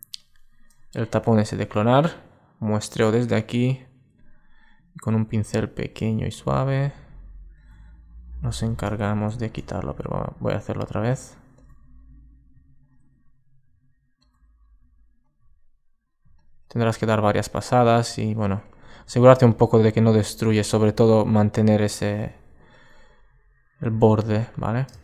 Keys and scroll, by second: 8.4 alt+super+z, 9.3 alt+super+z.